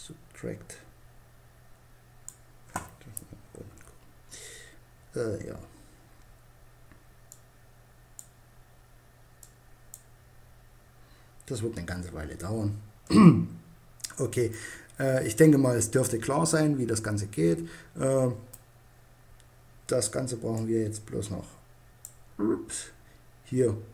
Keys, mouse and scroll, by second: 2.9 KP_1, 6.5-8.2 drag, 8.7-10.4 drag, 12.9-13.9 drag, 14.1 click, 14.6 middle click, 15.6 click, 19.9 click.